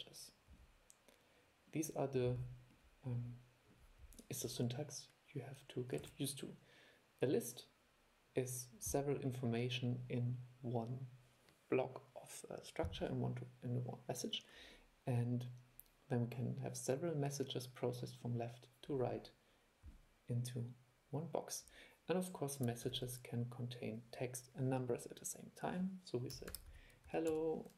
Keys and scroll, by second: 6.2 super+e, 23.1 super+2.